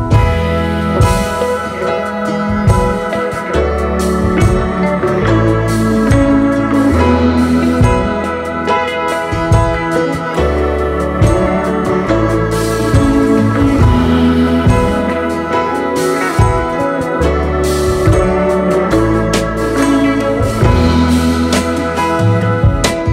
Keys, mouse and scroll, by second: 0.1-0.5 space, 1.1 b, 2.3-3.4 typing, 4.1 right click, 5.4 ctrl+z, 17.5 v, 17.7-18.1 alt+scroll down 7, 18.2-18.6 alt+scroll up 4, 18.7-19.2 space, 20.0 alt+scroll up 3.